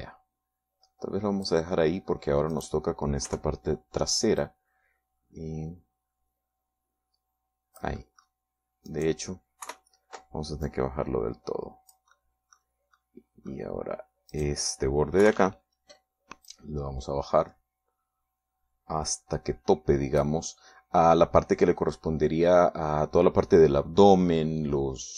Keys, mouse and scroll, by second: 2.9 middle click, 3.7 right click, 4.5 KP_3, 5.6-9.6 drag, 10.1 right click, 10.8 KP_3, 11.8-13.3 drag, 13.5 middle click, 14.2 middle click, 15.5 right click, 16.4 KP_3, 17.7-21.6 drag.